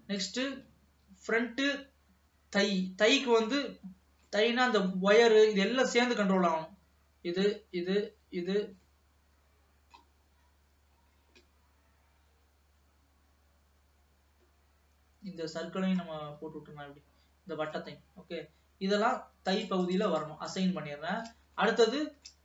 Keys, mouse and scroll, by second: 0.4 click, 4.1-4.5 scroll down 1, 4.5-7.0 middle drag, 7.0 l, 7.6 l, 8.8-9.1 scroll down 2, 9.1-10.5 middle drag, 10.5-11.2 scroll up 3, 11.2-14.1 scroll up 1, 16.3-18.2 middle drag, 18.2-19.5 scroll down 2, 19.5-21.2 drag, 21.2-21.7 scroll down 2, 21.7-22.4 shift+middle drag.